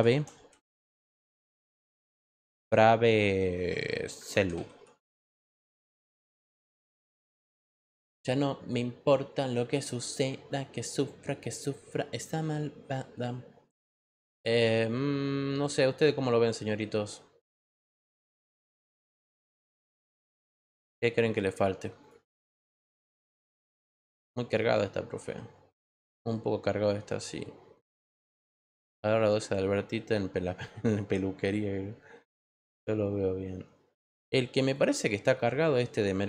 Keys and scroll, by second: 0.0-0.8 typing, 4.0-5.2 typing, 5.9 Return.